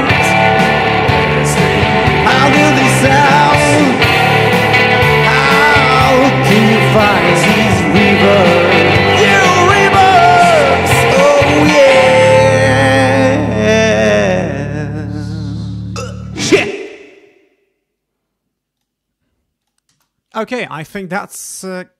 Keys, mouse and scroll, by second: 1.8 click, 4.0 click, 5.2 click, 7.3 click, 7.9-9.9 drag, 18.7 click, 19.6 click, 19.8 space.